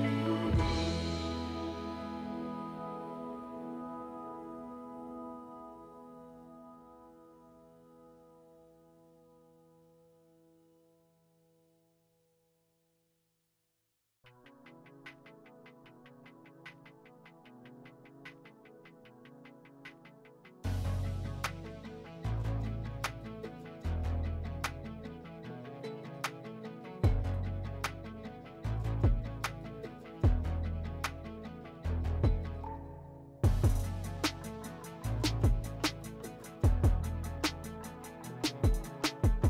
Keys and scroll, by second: 10.8 3, 12.6 2, 19.2 3, 20.5 5, 23.8 s, 32.6 s.